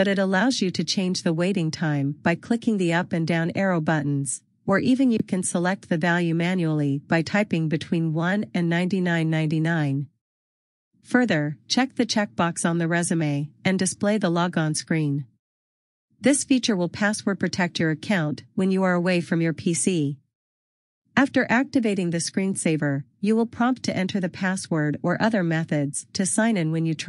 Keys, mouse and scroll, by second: 1.4 click, 4.7 click.